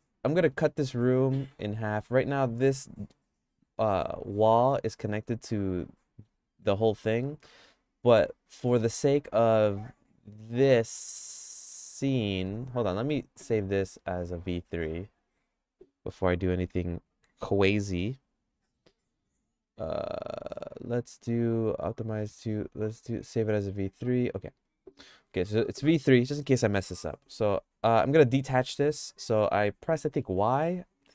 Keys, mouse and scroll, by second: 0.6 ctrl+r, 4.7 g, 10.9 middle click, 11.7 shift+middle click, 13.2 ctrl+s, 14.3 click, 26.4 middle click, 27.6 g, 30.2 y.